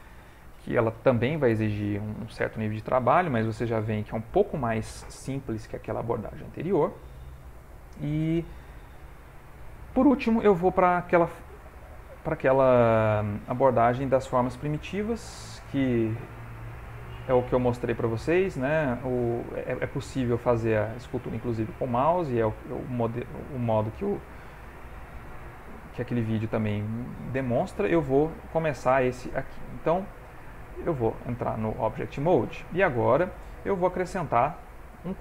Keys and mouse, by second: 9.9 middle click, 10.9 shift+middle click, 11.6 middle click, 12.3 ctrl+middle click, 24.5 shift+middle click, 25.0 shift+middle click, 29.2 ctrl+Tab, 30.3 x, 31.1 shift+middle click, 31.7 ctrl+middle click, 32.1 shift+middle click, 32.8 middle click, 33.7 middle click, 34.0 shift+middle click, 34.5 shift+a.